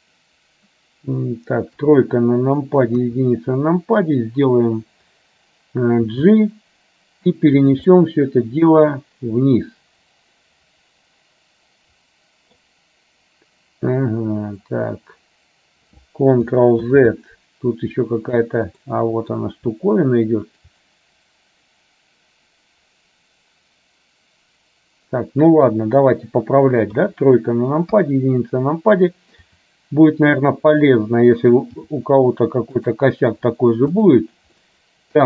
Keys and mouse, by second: 2.0 KP_3, 3.0 KP_1, 6.1 g, 8.0-12.8 middle drag, 16.9 ctrl+z, 18.9 middle click, 27.0 KP_3, 28.0 KP_1, 29.5 r, 31.8 g, 34.6-35.2 middle drag.